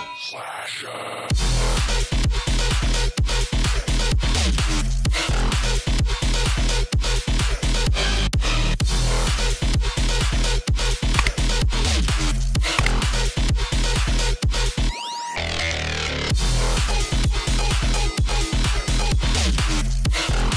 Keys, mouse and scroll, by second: 8.2 click, 10.5 click, 11.9-16.4 drag, 16.7-20.5 drag.